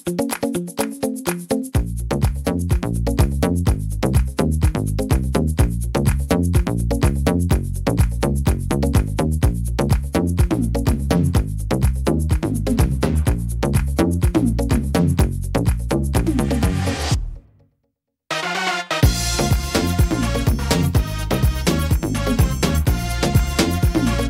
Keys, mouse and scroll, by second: 1.8-2.3 scroll down 5, 2.3 middle click, 4.6 scroll up 4, 5.4 scroll up 4, 5.6-7.0 scroll down 13, 6.9 scroll up 2, 8.2 click, 9.7 click, 11.3 click, 12.6 click, 14.9 x, 16.5 click, 18.0 click.